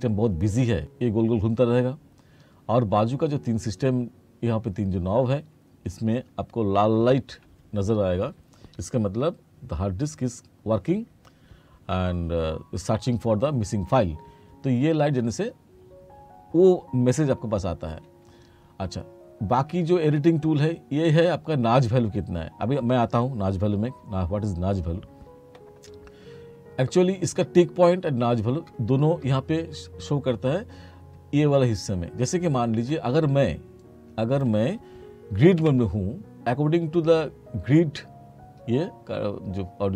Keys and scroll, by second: 35.7 F4.